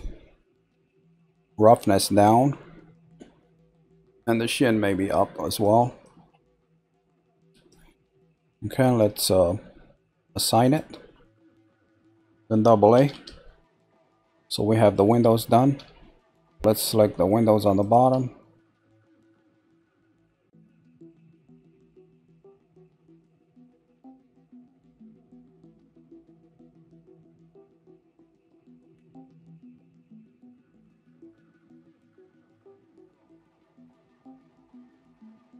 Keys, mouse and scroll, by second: 8.3-9.2 scroll down 1, 9.2 scroll up 1, 10.6 click, 12.9 a, 13.8-15.1 middle drag, 15.1-16.5 scroll up 3, 16.5 shift+middle click, 17.7 click, 18.6 shift+click, 19.1 shift+click, 19.6 shift+click, 20.0 click, 20.6 shift+click, 21.3 shift+click, 21.8 shift+click, 22.3 shift+click, 22.9 shift+click, 23.4 shift+click, 23.9 shift+click, 24.3 shift+click, 24.7-26.7 middle drag, 26.7 shift+click, 27.4 shift+click, 28.0 shift+click, 28.5 shift+click, 29.2 shift+click, 29.7 shift+click, 31.0 shift+click, 31.5 shift+click, 32.0 shift+click, 32.5 shift+click, 33.2 shift+click, 33.7 shift+click, 34.6 shift+click, 35.1 click.